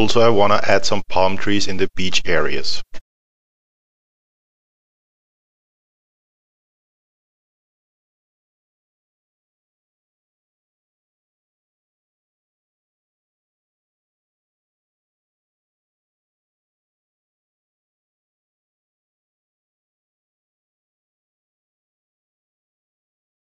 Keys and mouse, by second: 3.2 click, 7.7 alt+middle click, 8.4 click, 9.2 middle click, 9.3 click, 9.6 middle click, 9.7 click, 10.2 middle click, 10.3 click, 10.6 middle click, 10.7 click, 11.2 middle click, 11.3 click, 11.5 middle click, 11.6 click, 12.0 middle click, 12.2 click, 12.6 middle click, 12.6 click, 12.9 alt+middle click, 13.1 click, 14.0 middle click, 14.2 click, 14.6 middle click, 14.6 click, 15.0 middle click, 15.1 click, 15.7 alt+middle click, 15.9 click, 16.1 middle click, 16.2 click, 16.7 click, 16.9 middle click, 17.0 click, 17.4 middle click, 17.4 click, 18.2 middle click, 18.3 click, 18.6 middle click, 18.7 click, 18.9 middle click, 19.2 click, 19.6 middle click, 19.7 click, 20.0 middle click, 20.1 click, 20.4 middle click, 20.5 click, 21.7 alt+middle click, 21.9 click, 22.3 alt+middle click, 22.6 click.